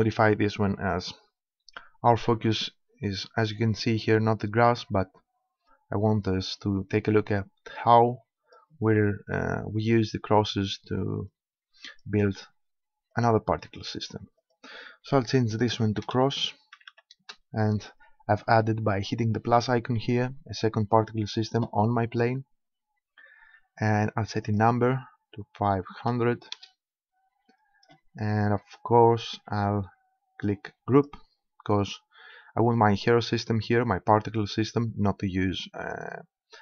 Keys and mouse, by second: 7.9-9.7 drag, 11.3-13.0 drag, 13.1-16.1 drag, 24.5-26.2 drag, 27.5-31.1 middle drag, 31.1-32.7 drag.